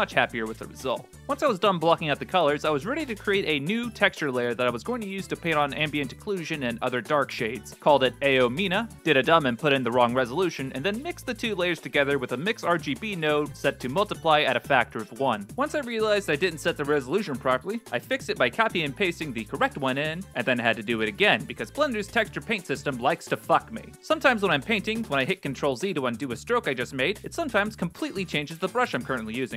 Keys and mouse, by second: 0.2-1.1 drag, 1.6-2.1 drag, 3.1 ctrl+space, 4.8 g, 5.6 shift+d, 6.9 click, 7.0 g, 7.8 click, 7.8 BackSpace, 9.6 b, 10.0 click, 11.2 click, 12.8-13.9 drag, 14.4 click, 15.3-17.7 drag, 19.9 n, 19.9 m, 26.0 click, 27.2 ctrl+z, 27.6 shift+f.